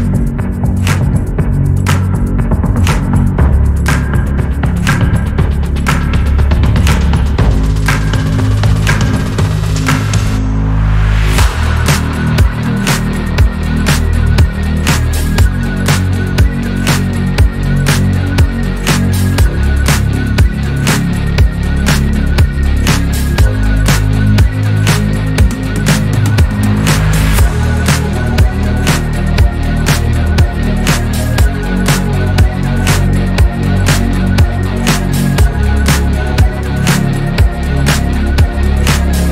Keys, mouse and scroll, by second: 0.7 scroll up 1, 1.0-1.7 shift+middle drag, 1.7 alt+z, 2.3 click, 3.3 click, 4.8 click, 6.2 scroll up 1, 6.7 Tab, 7.4 Tab, 8.4 z, 10.3 alt+z, 11.4 alt+click, 12.4 3, 13.6 alt+click, 16.6 shift+d, 18.7 p, 20.0 Tab, 20.1 click, 20.6 click, 20.8 Tab, 23.3-26.0 scroll up 2, 27.8 click, 29.0 alt+click, 30.3 s, 34.0 s, 37.4 click.